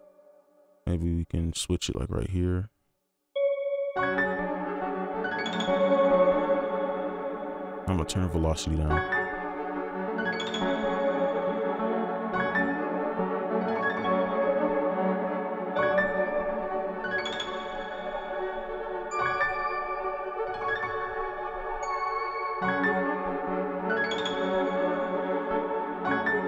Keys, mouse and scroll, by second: 6.4 space, 8.9 space, 12.1 double click, 16.4 right click, 18.4 ctrl+click, 24.2 right click.